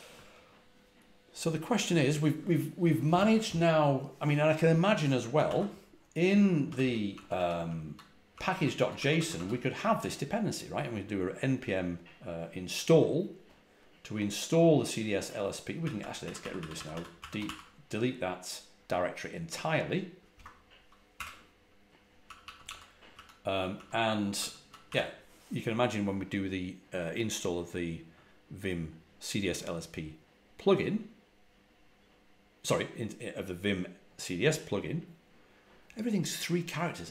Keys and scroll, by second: 5.2 ctrl+a, 5.3 ctrl+l, 6.4-8.9 typing, 15.5-17.8 typing, 20.2 Return, 21.0 typing, 22.1-24.7 typing.